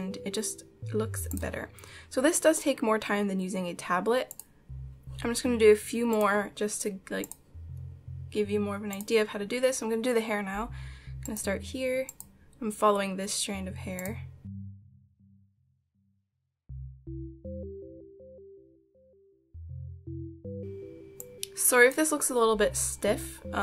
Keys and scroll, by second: 15.1 ctrl+z.